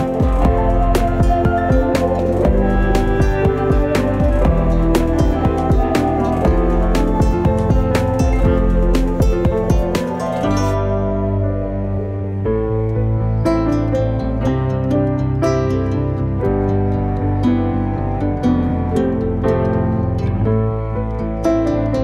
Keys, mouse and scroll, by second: 2.0 Tab, 2.4 Tab, 2.7 click, 3.0-4.5 middle drag, 6.7 click, 7.9-8.7 scroll down 6, 8.7 scroll up 2, 8.9 shift+middle click, 9.3 scroll down 1, 9.6 shift+middle click, 10.1 ctrl+s, 10.3-10.9 scroll up 2, 10.9 click, 11.6 g, 13.1 scroll down 1, 13.3 shift+middle click, 13.5-14.1 scroll up 1, 14.1 click, 14.7 shift+middle click, 15.3 shift+d, 17.8 shift+middle click, 18.3 click, 18.5-18.9 scroll up 2, 18.9 shift+middle click, 19.5 click, 19.8 middle click, 20.4-21.0 scroll up 3, 21.0 middle click, 21.5 Tab, 21.8 click.